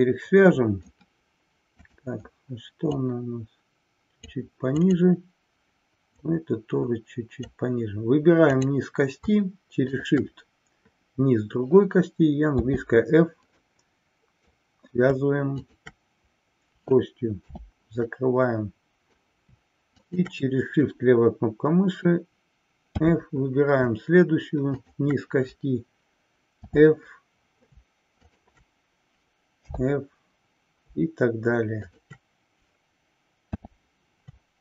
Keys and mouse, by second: 1.9 click, 3.1-4.4 drag, 5.0 click, 6.2-7.8 drag, 8.5 click, 9.9 shift+click, 13.8 middle click, 15.8 shift+click, 18.2-19.4 middle drag, 20.1 click, 31.8 shift+click.